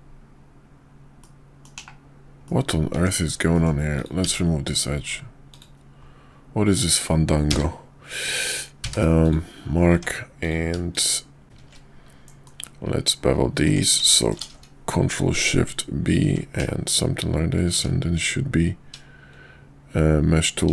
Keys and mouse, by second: 1.1-1.6 middle drag, 1.7 /, 2.4 middle drag, 2.9 Tab, 3.5 middle click, 3.9 click, 4.2 x, 7.3 a, 8.8 q, 9.9 Tab, 10.4 click, 10.9 shift+click, 12.1 ctrl+b, 14.3 ctrl+shift+b, 16.2 Tab, 16.6 /, 17.6 q.